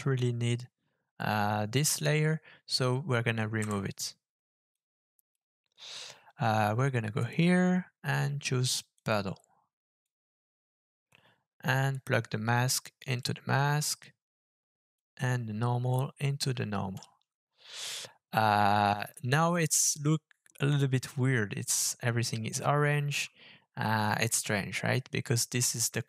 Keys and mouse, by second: 1.2 click, 3.6 Delete, 4.7 click, 7.2-9.1 drag, 10.1-11.1 drag, 11.9-13.2 drag, 14.9-15.9 drag, 25.8 click.